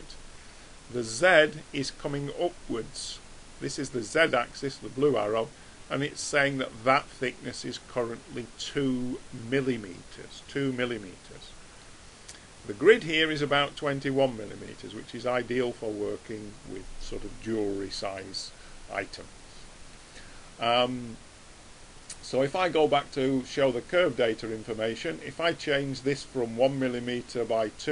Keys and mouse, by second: 11.4-13.4 middle drag, 14.8-16.6 middle drag, 18.7-21.4 middle drag, 23.8 click.